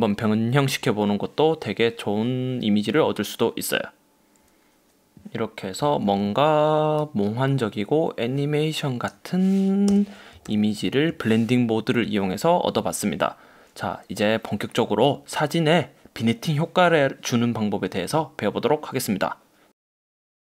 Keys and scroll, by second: 6.2 super+t, 10.0 Return, 10.6 super+-.